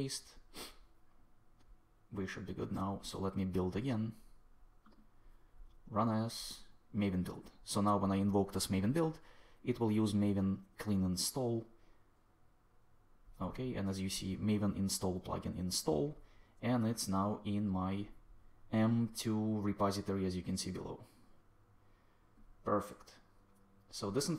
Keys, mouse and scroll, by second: 19.1-21.4 drag.